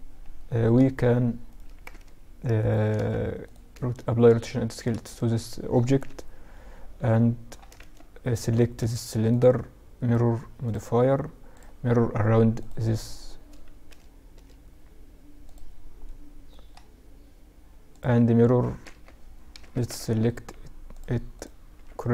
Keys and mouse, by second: 0.6-3.5 right drag, 2.1 ctrl+a, 3.6-5.2 middle drag, 5.2 KP_7, 6.9 z, 7.6-10.4 drag, 8.4-9.8 right drag, 10.6-12.5 drag, 13.0 z, 13.5 z, 14.6-15.2 drag, 15.2-17.0 middle drag, 17.0-19.0 drag, 19.0 z, 20.0-22.1 drag, 20.9 z.